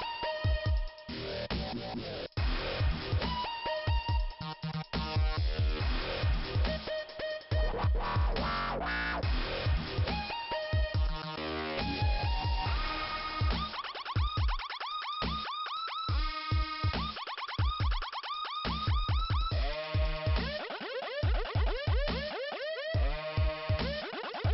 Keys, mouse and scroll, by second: 2.7 click, 2.8 click, 5.7 click, 6.6 click, 7.3 click, 8.0 click, 8.3-9.4 scroll down 2, 12.7 click, 12.8 click, 13.6 click, 13.7 click, 15.1 click, 15.2 click, 16.0 click, 17.7 click, 17.8 click, 18.8 click, 18.8 click, 19.5 click, 19.6 click, 20.1 scroll up 2, 21.7 scroll down 2, 23.4 click, 23.5 click, 24.1 click.